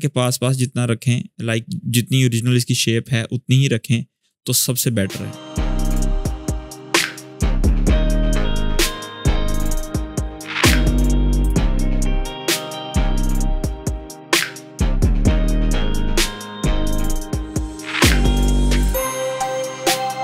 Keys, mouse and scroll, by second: 0.2-3.9 drag, 3.9-6.0 drag, 6.0 click, 6.3 ctrl+z, 6.5 space, 6.6 click, 6.7 space, 7.0-7.6 click, 7.8-8.1 click, 8.3 click, 8.6-9.0 alt+click, 9.2-9.6 click, 9.8-10.5 alt+click, 10.7-11.2 click, 11.6 click, 12.0 drag, 13.2-14.0 alt+click, 14.2 click, 14.5-15.1 drag, 16.4 space, 16.4 click, 16.5 space, 16.7 click, 16.8 space, 16.8 click, 17.0 space, 17.3 shift+click, 17.5-18.9 drag, 19.2 space, 19.2 click, 19.7 shift+scroll down 1.